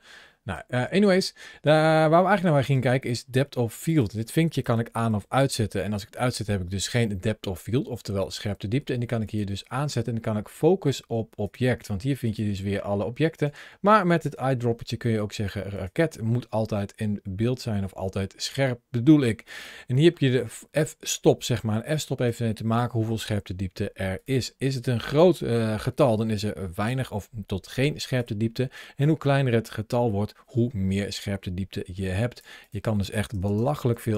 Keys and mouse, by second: 0.7 ctrl+z, 2.4 click, 3.7 click, 4.4 click, 4.9 click, 9.0 click, 11.2 click, 12.0-13.2 drag, 19.4-22.1 drag, 24.9-28.0 drag, 28.8-32.2 drag, 32.4-33.9 drag, 33.4 KP_0, 33.5 KP_0.